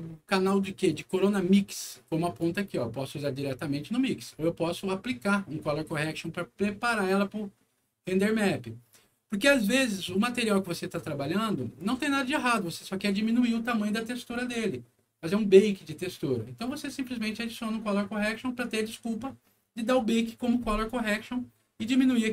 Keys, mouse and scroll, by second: 0.8-2.3 drag, 8.9-9.5 scroll down 4, 12.2 scroll up 2, 14.3 click.